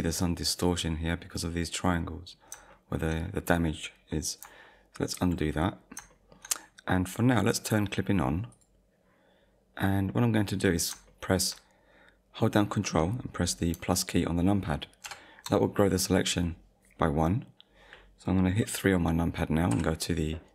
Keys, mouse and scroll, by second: 1.5 middle click, 2.3-2.7 scroll down 2, 2.7 shift+middle click, 3.3 middle click, 5.1 ctrl+z, 6.1 shift+middle click, 8.5 click, 10.1 middle click, 10.8-11.1 scroll down 2, 11.2 shift+middle click, 15.0 ctrl+KP_Add, 19.7 KP_3.